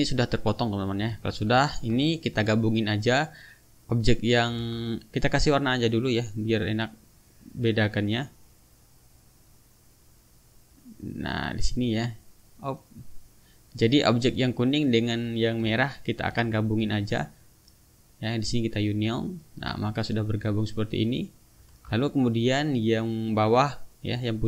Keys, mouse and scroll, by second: 0.2 click, 1.2 ctrl+z, 2.4 ctrl+click, 3.4 click, 3.9 click, 4.6 ctrl+z, 6.1 click, 7.6 click, 8.4 click, 9.2 click, 9.9 click, 10.7 click, 11.7 click, 13.1 click, 13.7 click, 14.5 click, 15.8 shift+click, 17.7-19.1 drag, 20.5-21.8 drag, 21.8 ctrl+z, 23.2 click.